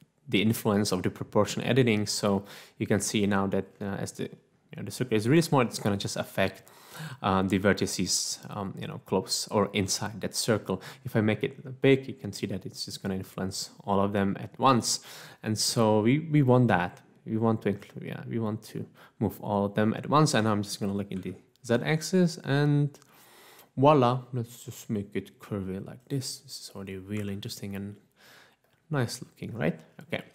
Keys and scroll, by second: 22.2 z, 27.3 Tab.